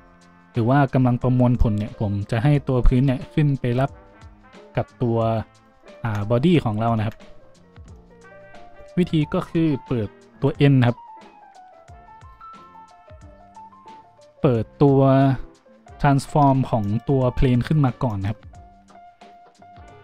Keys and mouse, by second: 5.5 g, 5.6-11.7 middle drag, 7.0 `, 11.7 click, 11.7 n, 11.9 middle click, 12.7 click, 12.8-19.3 middle drag.